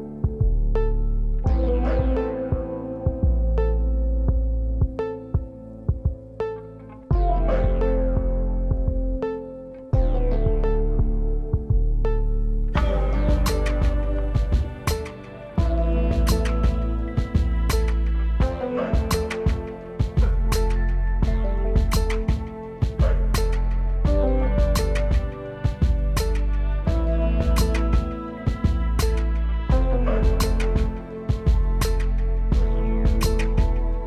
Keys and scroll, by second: 11.4 space, 19.9 space.